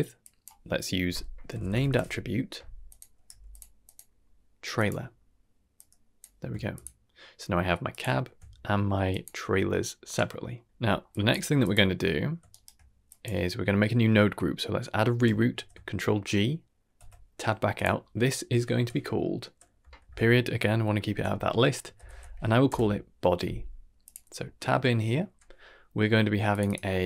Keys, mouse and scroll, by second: 0.1-2.9 drag, 3.2 g, 3.8-4.8 drag, 5.7-6.2 drag, 6.7 ctrl+shift+click, 7.8 ctrl+shift+click, 8.7 middle click, 9.0 drag, 9.3 x, 10.3 middle click, 10.8 middle click, 11.0 drag, 11.4 g, 11.9 middle click, 12.4 shift+right click, 13.0 drag, 15.5 ctrl+g, 16.9 Tab, 17.7-22.6 drag, 24.0 click, 24.4 Tab, 25.2 n, 26.6-27.0 drag.